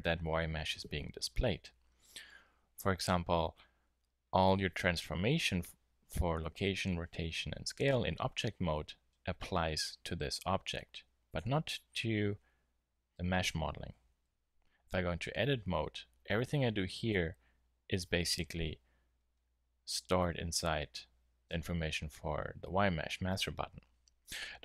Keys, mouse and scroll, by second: 2.1 n, 2.9 n, 8.7 n, 11.2-11.9 drag, 14.8 Tab.